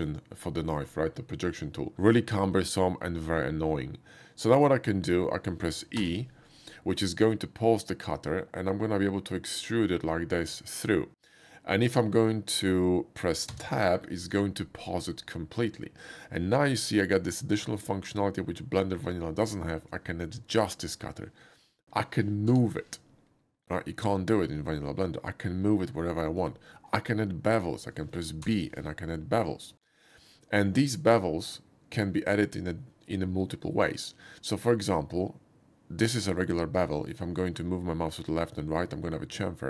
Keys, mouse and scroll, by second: 6.0 e, 7.2-8.3 middle drag, 8.5 e, 13.5 Tab, 14.6-16.3 middle drag, 22.7 g, 26.4 click, 27.1 middle click, 28.5 b.